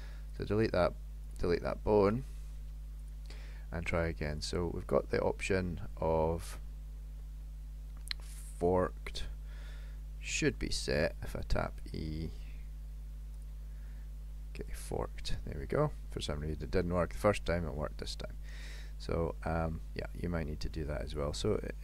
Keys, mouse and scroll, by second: 1.3 click, 2.2 Delete, 4.4 click, 7.3 middle click, 8.3 middle click, 10.4 KP_7, 11.2 e, 14.7 click.